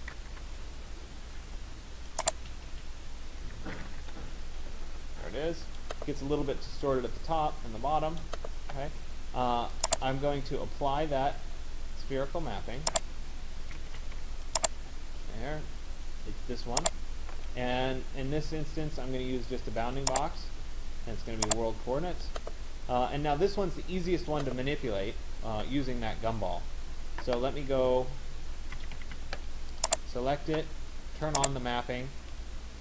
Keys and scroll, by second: 0.0 Return, 0.2 s, 0.3 Return, 13.5 Escape, 28.4 Escape.